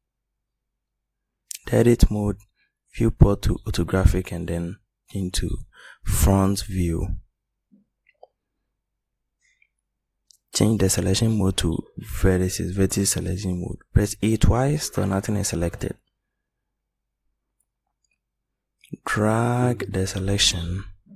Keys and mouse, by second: 1.2 typing.